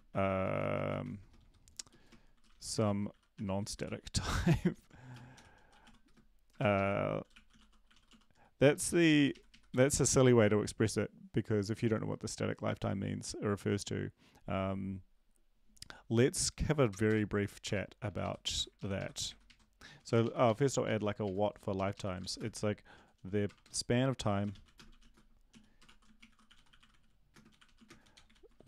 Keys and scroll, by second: 0.0-1.4 typing, 1.4 End, 2.6-9.2 typing, 6.7 ctrl+shift+Left, 8.7 Left, 9.2 Left, 9.3 Right, 9.5 Right, 9.7 End, 17.1 Return, 17.6 Return, 18.0 Up, 18.2 Up, 18.5 End, 18.7 ctrl+Left, 18.9 ctrl+Left, 19.3 ctrl+Right, 19.4 ctrl+Right, 19.9 Up, 20.0 Up, 20.2 Up, 20.8 Up, 20.8 ctrl+s, 24.6-28.6 typing.